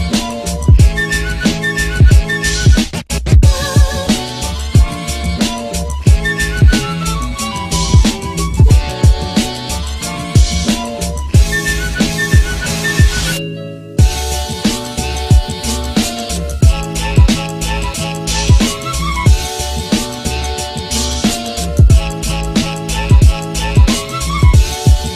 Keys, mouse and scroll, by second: 0.3 space, 4.6 space, 7.1 space, 9.4 space, 12.0 space, 19.2 space.